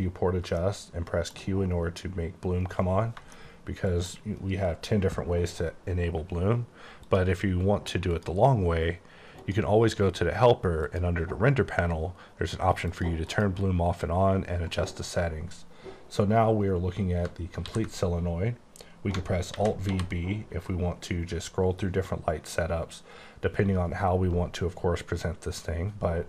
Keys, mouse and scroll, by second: 0.7 shift+middle click, 7.2 click, 8.2 click, 9.5 click, 10.9 click, 13.0 click, 13.4 click, 17.4 click, 17.7 s, 19.6 v, 20.0 b, 20.7-21.5 scroll up 2, 21.5-23.1 scroll up 8, 23.7 scroll up 2, 24.4-26.2 scroll up 24.